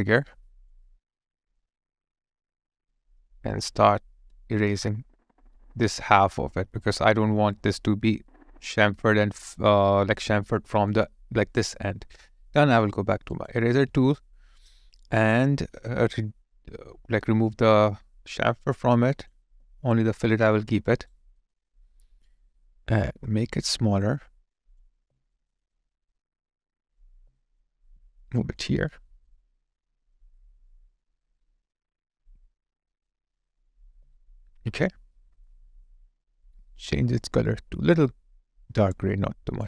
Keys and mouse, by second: 4.3 space, 9.5 alt+click, 10.8 alt+click, 20.8 alt+right click, 21.4 alt+click, 27.0 alt+click, 27.7 alt+right click, 28.4 alt+click, 28.7 alt+middle click, 29.2 alt+click, 33.9 alt+right click, 34.3 alt+click, 35.1 alt+middle click.